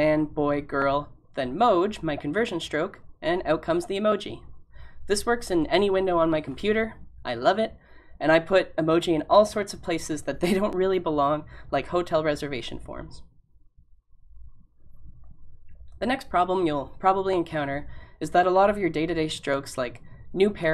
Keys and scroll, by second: 7.1 typing.